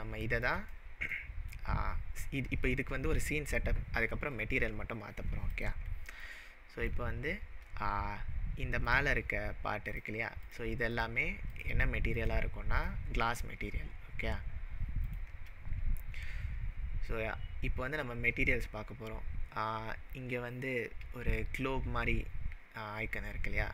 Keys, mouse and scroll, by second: 5.6 click, 6.2-7.1 middle drag, 7.8 scroll up 1, 8.9 click, 9.9 click, 10.4 click, 10.9 click, 11.5 click, 12.2 click, 12.8 click, 15.2 click.